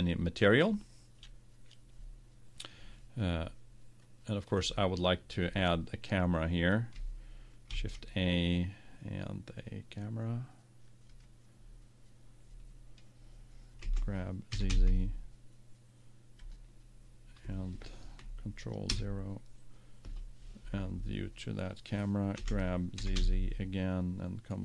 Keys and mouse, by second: 1.6-8.0 middle drag, 8.0 shift+a, 14.0 g, 16.7-18.6 drag, 19.2 ctrl+KP_0, 22.2 g.